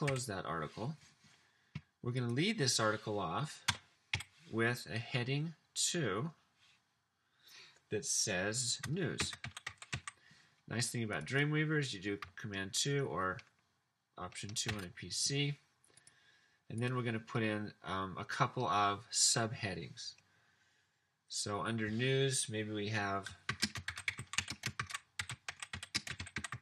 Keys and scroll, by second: 0.1 /, 3.8 Return, 4.1 Up, 9.1-10.3 typing, 14.8 super+2, 23.3-26.6 typing.